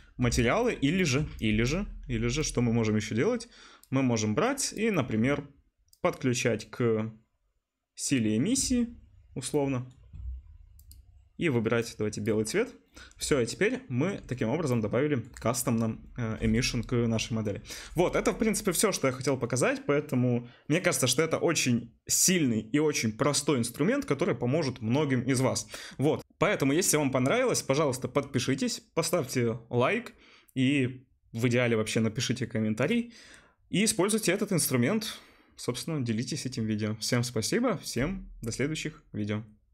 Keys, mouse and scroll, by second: 2.1 Delete, 8.7-12.3 drag, 8.7-11.0 right drag, 12.3-14.1 right drag, 14.1 right click, 14.7 right click, 14.8 right click, 14.9 right click, 15.8 right click.